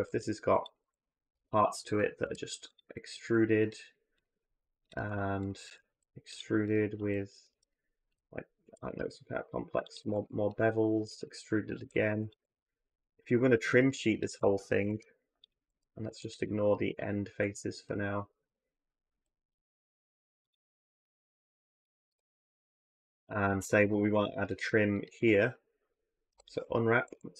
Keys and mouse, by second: 0.6 a, 0.8 a, 1.1 3, 1.3 click, 2.0 e, 3.0 click, 4.0 click, 4.6 shift+click, 5.7 e, 7.3 2, 8.4 ctrl+b, 9.8-14.1 typing, 14.6 ctrl+b, 15.3 a, 15.5 a, 15.8 3, 16.7 ctrl+b, 19.1 shift+g, 20.8 x, 21.9 a, 22.0 a, 23.8 3, 24.3 click, 24.7 ctrl+click, 26.1-27.3 typing.